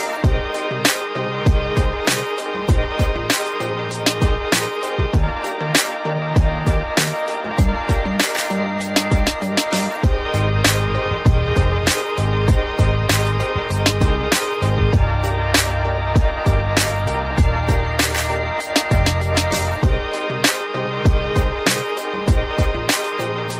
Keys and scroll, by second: 6.4 ctrl+alt+z, 16.0 ctrl+alt+z.